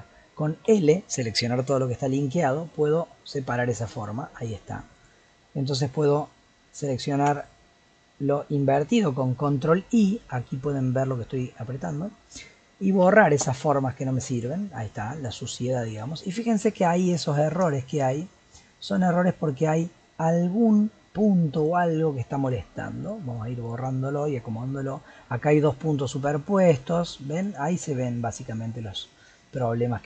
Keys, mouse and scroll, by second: 0.7 l, 2.6 g, 7.1 ctrl+i, 13.0 x, 16.9-17.2 scroll up 3, 17.2 shift+middle click, 17.7-18.7 scroll up 2, 18.7-19.5 scroll up 1, 19.5 click, 20.7 g, 22.4 x, 23.6 click, 26.1 g.